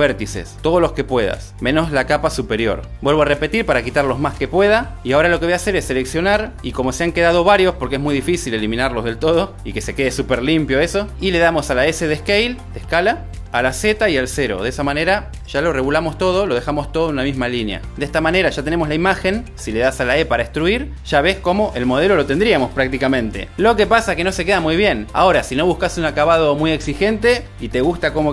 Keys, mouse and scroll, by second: 0.2 x, 3.4 click, 5.3 x, 6.4 click, 11.7 s, 14.2 z, 14.8 0, 15.7 Return, 20.2 e, 21.6 click, 22.4 Tab.